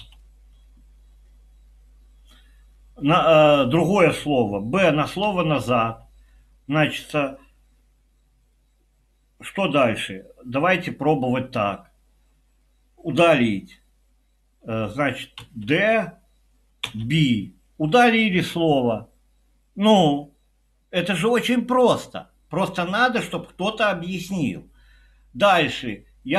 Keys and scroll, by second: 0.1 Escape, 5.3 b, 15.5 d, 16.6-17.3 typing.